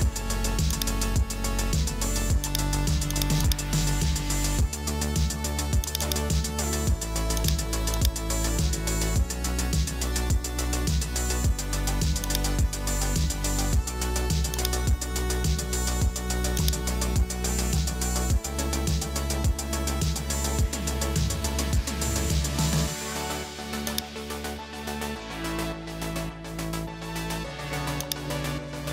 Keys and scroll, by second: 21.0 Return.